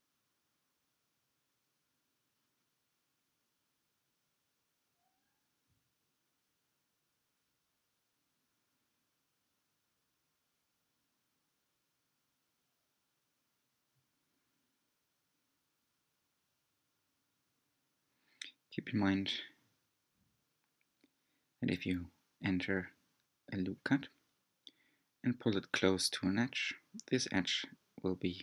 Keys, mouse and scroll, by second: 2.2-2.7 scroll down 2, 2.7-5.8 middle drag, 6.2-7.1 scroll down 2, 7.1 alt+z, 7.7-10.1 middle drag, 10.1-10.5 scroll up 1, 10.5-12.1 middle drag, 12.1 r, 17.2 r, 22.2 Tab, 22.8-25.8 middle drag, 25.8 Tab, 26.4-28.4 middle drag.